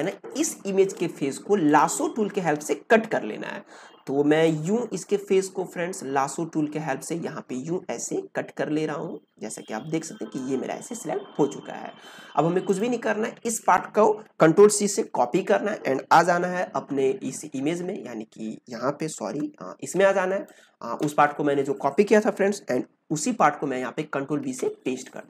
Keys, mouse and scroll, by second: 4.4-12.6 drag, 15.0 ctrl+c, 16.6 ctrl+Tab, 20.1 ctrl+space, 20.4 ctrl+click, 20.6 ctrl+space, 24.4 ctrl+v.